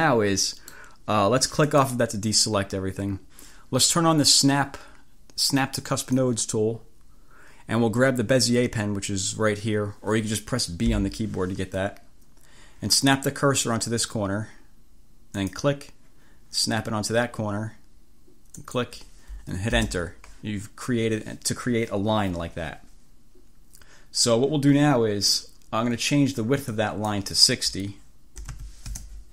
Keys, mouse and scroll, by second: 1.8 click, 5.9 click, 10.9 b, 15.5 click, 18.7 click, 19.8 Return, 26.8 click, 28.2-29.1 typing.